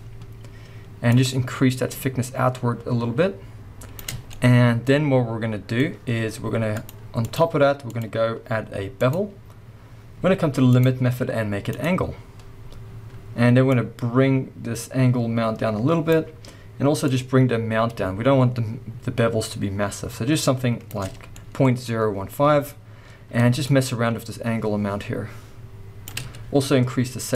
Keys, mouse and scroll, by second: 0.4-1.1 scroll up 1, 4.3-6.7 middle drag, 6.7-21.3 drag, 21.3-23.7 middle drag, 21.7-22.8 scroll up 2, 22.8-23.7 scroll up 1, 23.7-27.3 shift+drag.